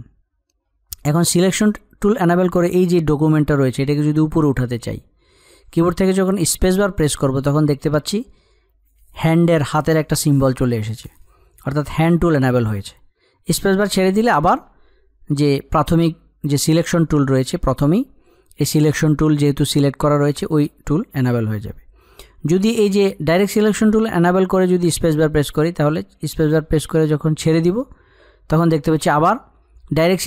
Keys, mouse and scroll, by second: 2.7 click.